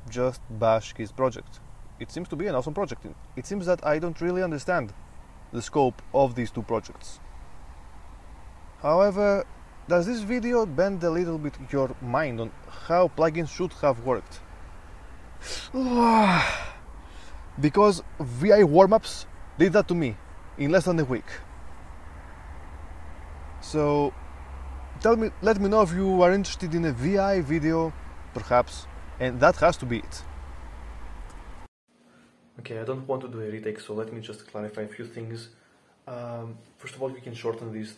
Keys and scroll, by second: 14.3 super+u, 30.4 super+3, 31.6 super+o.